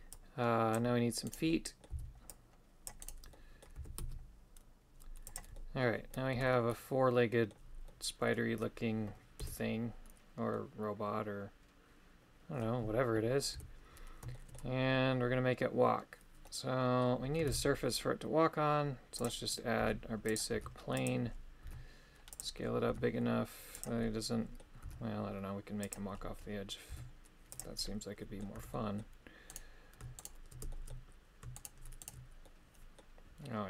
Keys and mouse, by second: 1.5 middle click, 2.0 c, 3.4 middle click, 3.8 e, 5.6 middle click, 6.4 Tab, 6.5-7.6 middle drag, 7.9 middle click, 9.5 KP_3, 10.6-12.7 middle drag, 13.6 KP_3, 14.4 shift+middle click, 16.5 middle click, 17.5 shift+a, 19.9 s, 20.4 click, 20.6 s, 21.7 s, 22.4 click, 23.0 s, 23.8 click, 24.1 middle click, 24.9 s, 25.9 click, 27.0 s, 27.6 click, 27.9 middle click, 28.6 Tab, 28.8 middle click, 30.2 shift+right click, 30.8 shift+middle click, 31.6 shift+right click, 32.1 shift+right click, 32.5 middle click.